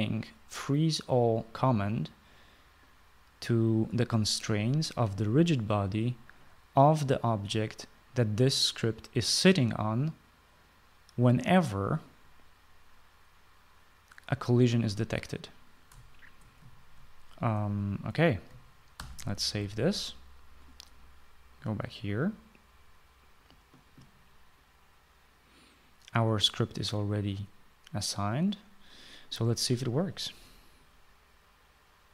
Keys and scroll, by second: 19.7 ctrl+s.